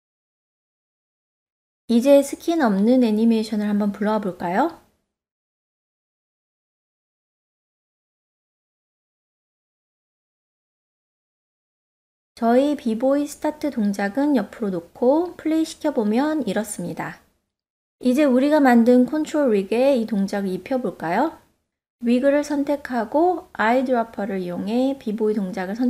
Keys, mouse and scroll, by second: 0.2 shift+middle drag, 3.7-6.2 drag, 11.8 g, 12.5 click, 13.5-13.8 shift+middle drag, 15.6 click, 16.1 space, 18.1 space, 18.7 click, 18.7 space, 19.8 ctrl+middle drag, 20.2 shift+middle click, 21.5 click, 23.2 click.